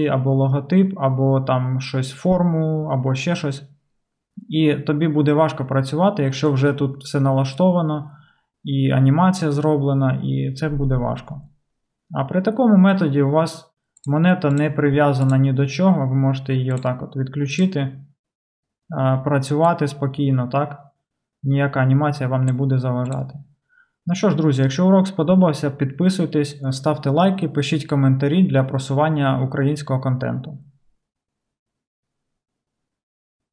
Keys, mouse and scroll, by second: 14.6 middle click, 15.3-16.9 drag, 16.9-17.6 middle drag, 17.6 click, 17.7-19.7 middle drag, 19.7-33.5 drag.